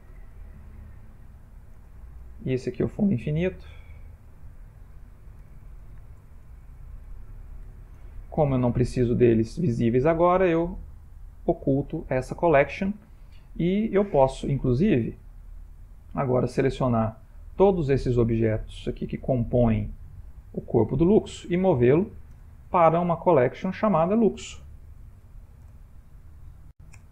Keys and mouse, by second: 2.9 click, 4.1 click, 4.5 click, 10.3 click, 11.2 click, 13.3 middle click, 14.7 ctrl+middle click, 15.6 middle click, 16.7 click, 18.2 middle click, 22.3 m.